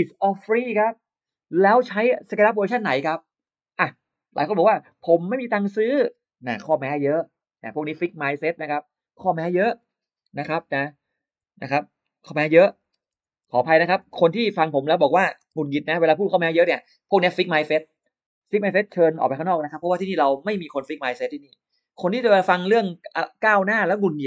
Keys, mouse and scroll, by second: 4.2 click, 5.2 click, 10.7-16.1 typing.